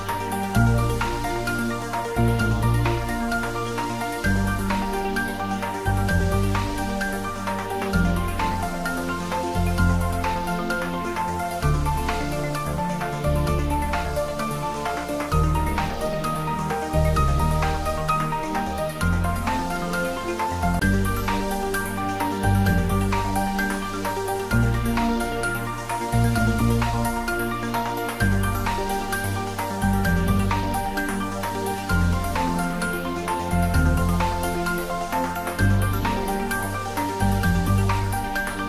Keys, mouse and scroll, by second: 4.6 scroll up 1, 5.1-8.2 middle drag, 8.2 click, 28.7 scroll down 1.